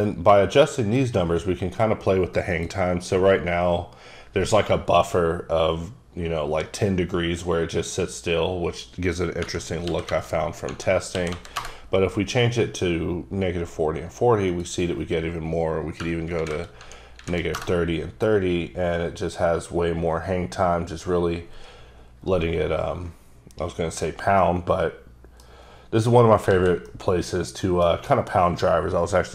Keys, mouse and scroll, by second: 2.5 click, 9.5 KP_Subtract, 9.9 KP_4, 10.4 KP_0, 11.2 KP_4, 11.3 KP_0, 11.6 KP_Enter, 14.6 click, 16.4 KP_3, 16.5 KP_0, 17.2 KP_3, 17.3 KP_0, 17.6 KP_Enter, 23.5 scroll down 1, 24.5 middle click, 26.5 alt+a, 26.9 middle click.